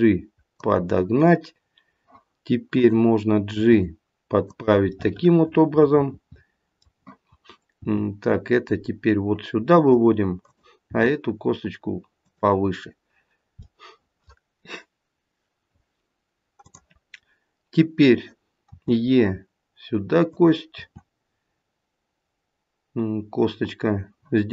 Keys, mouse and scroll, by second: 2.7 click, 3.5 g, 4.9 middle click, 5.7 middle click, 6.5 middle click, 7.7 g, 10.4 click, 10.8 g, 13.8 middle click, 16.6 click, 18.7 e, 20.7 e.